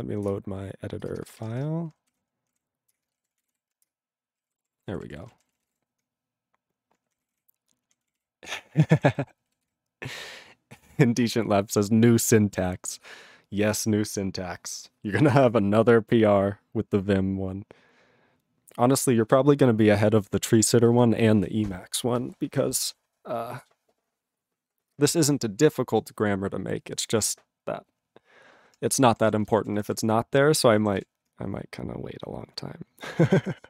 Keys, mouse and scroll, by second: 3.2 ctrl+Return, 4.1 ctrl+Return, 4.5 ctrl+=, 5.3 ctrl+space, 5.3 ctrl+e, 5.4 ctrl+n, 5.7 ctrl+e, 5.7 ctrl+g, 7.2 ctrl+o, 7.2 ctrl+n, 7.3 ctrl+o, 7.9 ctrl+p, 8.1 ctrl+k, 8.5 ctrl+p, 9.0 ctrl+e, 9.1 ctrl+n, 10.1 ctrl+s, 29.0 ctrl+p, 29.4 ctrl+space, 29.4 ctrl+e, 29.5 ctrl+n, 29.6 ctrl+e, 29.6 ctrl+n, 29.9 ctrl+g, 31.0 ctrl+s.